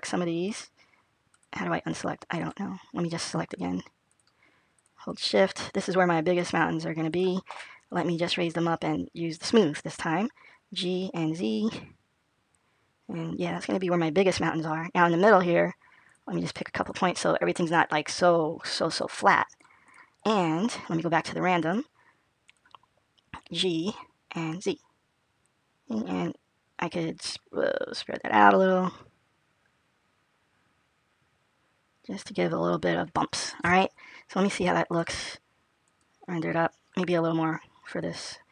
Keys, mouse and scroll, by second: 0.3 shift+click, 1.2 shift+click, 2.2 click, 2.9 click, 3.3 click, 3.9 click, 4.6 shift+click, 4.9 shift+click, 6.3 shift+click, 6.9 shift+click, 8.0 click, 10.3 g, 16.4 shift+click, 18.3 shift+click, 20.6 shift+click, 21.4 click, 23.5 g, 35.6 alt+click, 35.7 click, 37.2-37.7 scroll up 2, 37.7-38.5 scroll down 1.